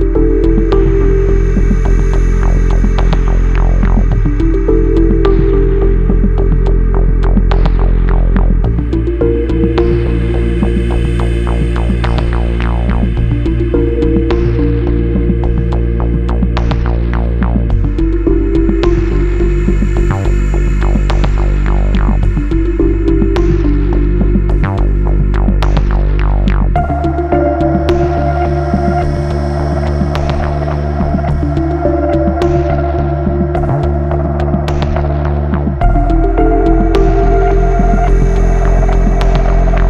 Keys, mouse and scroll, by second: 0.3 F9, 2.2 click, 3.4 ctrl+click, 5.3 click, 6.4 click, 7.4 ctrl+click, 8.4 ctrl+r, 9.7 ctrl+click, 10.7 ctrl+r, 11.7 ctrl+click, 12.7 ctrl+r, 13.2 click, 14.4 ctrl+click, 15.7 click, 15.8 double click, 17.8 click, 19.2 click, 22.6 click, 25.9 double click, 26.9 ctrl+click, 28.1 ctrl+r, 29.3 ctrl+click, 30.4 ctrl+r, 31.1 ctrl+click, 32.4 ctrl+r, 33.0 click, 34.4 ctrl+click, 36.5 click, 37.7-38.1 scroll up 1, 38.5-39.3 scroll down 1.